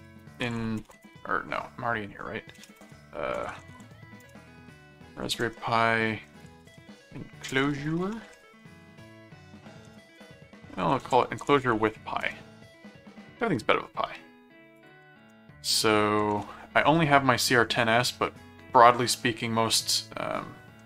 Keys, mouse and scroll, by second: 0.0-1.5 typing, 2.5-12.4 typing, 14.7 ctrl+click, 15.2 ctrl+Tab, 16.2 ctrl+Tab, 17.5 scroll up 2, 18.1 middle click, 19.2-20.8 middle drag.